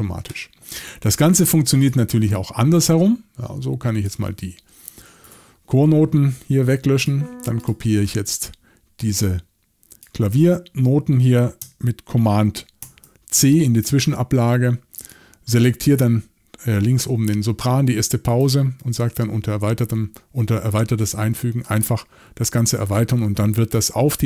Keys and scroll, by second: 5.2 BackSpace, 12.8 super+c.